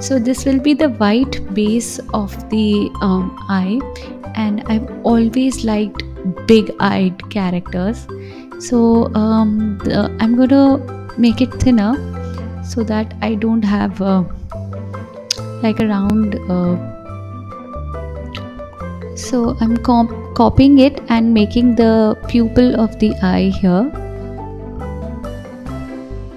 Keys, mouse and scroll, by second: 0.1 s, 1.4 KP_7, 2.7 KP_1, 3.3 click, 4.6-5.9 drag, 6.6 KP_7, 8.7 shift+c, 9.3-10.5 scroll up 5, 10.5 click, 11.3-12.5 scroll up 2, 12.5-14.2 drag, 15.5 KP_1, 16.8-18.1 scroll down 1, 18.2 shift+d, 19.7 s, 20.8 g, 24.2 g.